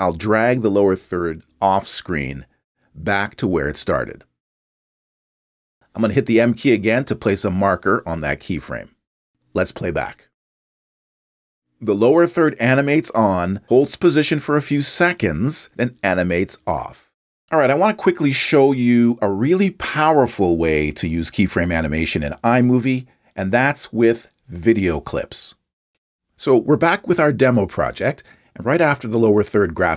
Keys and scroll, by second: 8.7 m.